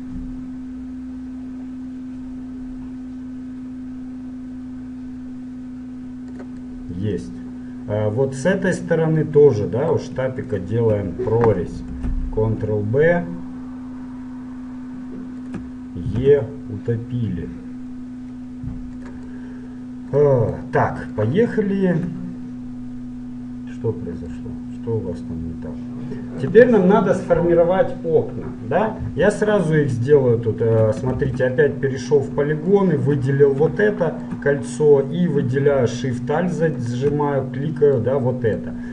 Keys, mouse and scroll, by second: 6.8-8.4 middle drag, 9.0-10.6 middle drag, 10.6-12.5 right drag, 12.2 ctrl+b, 16.3 e, 19.5 middle click, 20.4-26.1 middle drag, 29.6-31.6 middle drag, 31.4 ctrl+Tab, 32.8-34.6 right drag, 34.0-36.7 middle drag, 36.7-38.2 right drag, 38.0-38.9 middle drag, 38.2 right click.